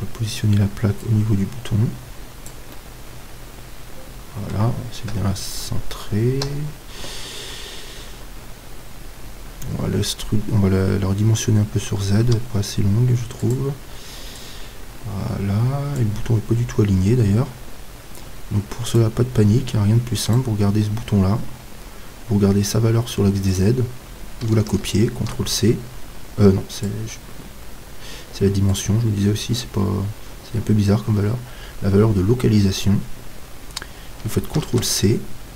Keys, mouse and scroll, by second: 1.0-5.1 drag, 2.7-5.1 middle drag, 5.1 KP_1, 6.4 KP_3, 8.2-11.9 middle drag, 11.9 s, 13.5-16.2 drag, 18.9-22.2 right drag, 22.2-25.3 middle drag, 23.5-35.5 drag, 28.7-30.5 middle drag.